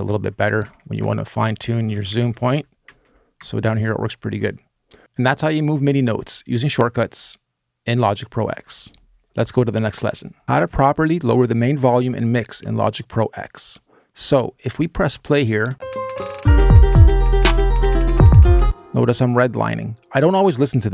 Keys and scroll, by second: 0.1 super+Left, 0.2 super+Left, 0.4 super+Down, 0.5 super+Down, 0.8 super+Up, 0.9 super+Up, 1.2 super+Right, 1.4 super+Right, 2.0 super+Down, 2.1 super+Down, 2.3 super+Up, 2.6 super+Left, 2.8 super+Left, 3.2 super+Up, 15.4 space, 18.4 space.